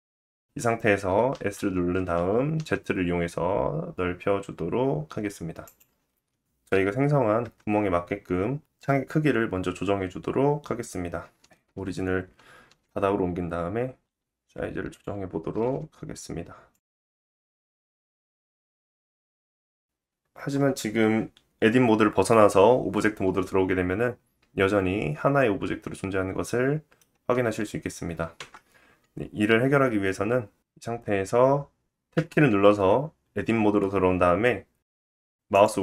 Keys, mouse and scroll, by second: 5.6-6.1 scroll up 1, 6.2 Tab, 8.2 KP_1, 14.9-21.2 middle drag, 14.9-17.2 typing, 17.8-19.0 scroll up 2, 21.2 Tab, 21.2 click, 21.8 Tab, 21.8-35.6 middle drag, 23.4 scroll up 1, 23.7-24.1 scroll down 1, 24.1 g, 27.3 Tab, 31.4 Tab, 35.6-35.8 drag, 35.6 right click.